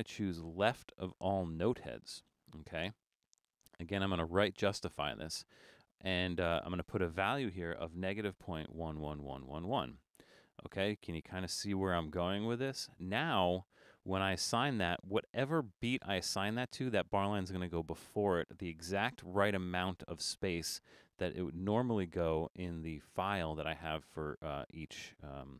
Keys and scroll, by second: 7.8-10.8 typing.